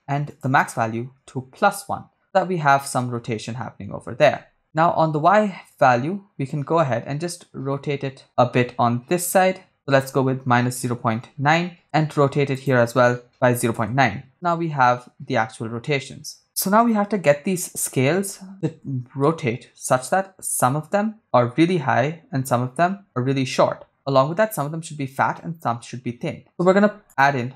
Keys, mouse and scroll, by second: 0.3-1.6 drag, 5.7-11.8 shift+drag, 12.5-13.8 drag, 23.9-24.5 scroll down 3, 25.4-26.5 middle drag, 27.0 click.